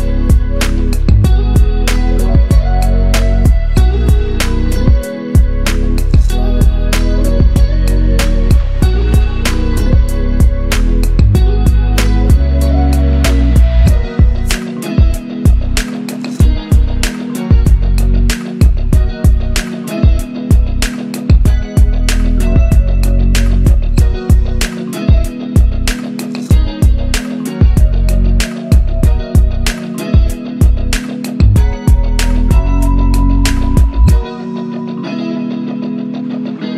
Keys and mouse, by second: 7.1 middle click, 8.2 click, 12.5 middle click, 16.5 ctrl+shift+click.